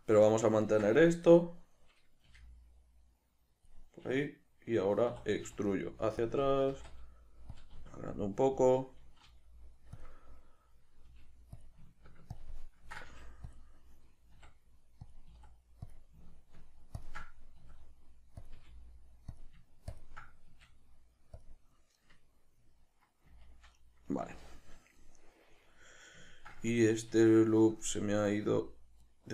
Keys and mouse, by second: 2.3 g, 3.7 click, 5.1 e, 6.3 click, 6.6 s, 7.6 click, 7.7 s, 8.7 click, 9.3 g, 10.0 click, 11.1 g, 11.7 click, 12.3-13.1 ctrl+drag, 13.1 g, 14.3 r, 15.1 click, 15.3 s, 15.9 click, 17.0 ctrl+click, 17.6 s, 18.4 click, 18.5 g, 19.4 click, 19.9-20.4 ctrl+drag, 20.4 s, 21.4 click, 21.9-29.0 middle drag, 23.2 z, 24.2 z, 29.0 alt+right click.